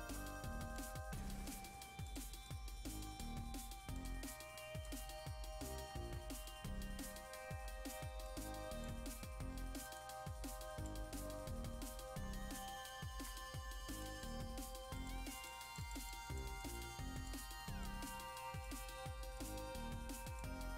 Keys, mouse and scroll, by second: 0.9-3.9 drag, 3.9 click, 5.0-5.7 scroll down 1, 5.7-6.1 scroll up 1, 7.4-8.2 scroll down 1, 8.2-9.8 drag, 9.8-11.6 drag, 11.6-11.9 scroll up 1, 11.9-12.9 scroll down 1, 12.9 click, 13.9-20.7 drag.